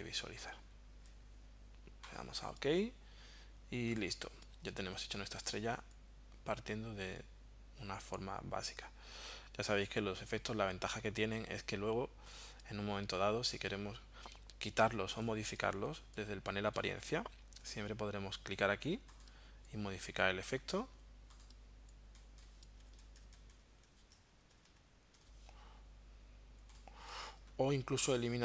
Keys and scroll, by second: 22.8 Right, 23.0 Down, 24.1 Up.